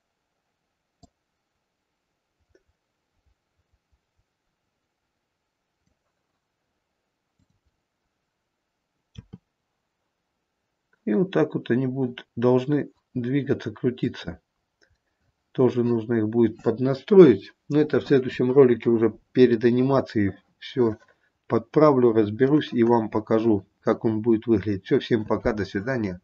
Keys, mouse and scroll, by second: 1.2 click, 7.5 click, 9.3 r, 14.9 scroll down 1, 15.2 middle click, 15.4 middle click, 16.4 middle click, 18.6-20.4 scroll down 5, 19.8 middle click, 21.7-22.4 scroll up 3, 22.4 scroll down 1, 22.7 middle click.